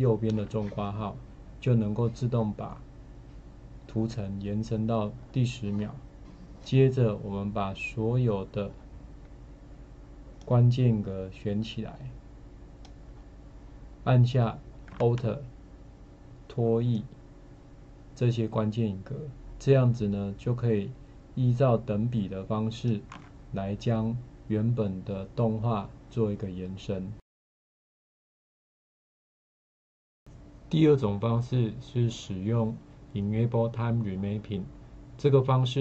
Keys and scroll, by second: 0.3 alt+].